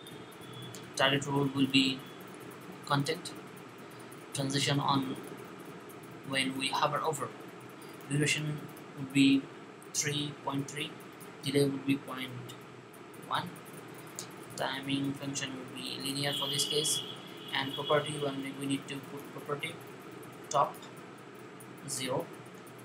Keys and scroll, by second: 9.4-10.2 typing, 11.9 typing, 13.0 typing, 21.8 0.